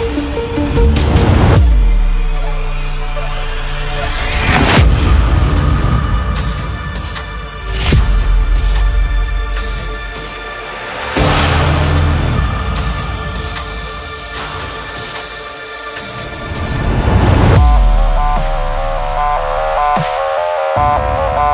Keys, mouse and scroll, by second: 0.5-2.8 drag, 2.8 space, 3.0 click, 3.2 space, 3.6-10.4 drag, 10.4 Return, 11.4 space, 11.5 click, 11.6 space, 12.1 scroll down 1, 12.4 space, 12.5 click, 12.6 space, 12.9 scroll down 1, 13.2 scroll up 1, 13.6 scroll down 1, 13.7 scroll up 1, 13.8 space, 14.0 click, 14.2 space, 15.0 click.